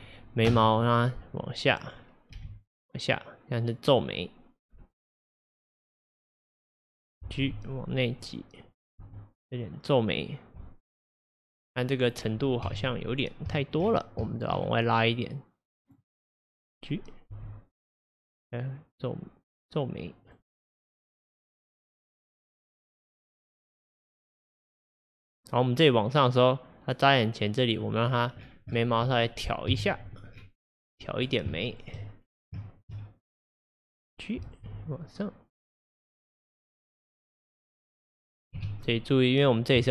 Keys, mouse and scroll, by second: 2.4 g, 6.7 click, 7.5 g, 8.8 click, 9.1 g, 11.4 scroll, 11.8-12.2 middle drag, 12.2-12.6 scroll, 12.7 KP_3, 13.6 shift+middle drag, 13.8-14.3 scroll, 14.3 shift+middle drag, 14.6-15.0 scroll, 15.2 click, 16.3-17.4 scroll, 17.4 g, 21.5-24.5 drag, 28.1-28.5 scroll, 29.8 KP_1, 30.4 scroll, 31.6-32.3 shift+middle drag, 32.3-32.6 scroll, 32.7 shift+middle drag, 33.0-33.3 scroll, 33.7 click, 34.7 g, 38.6 KP_3, 39.4-39.9 scroll.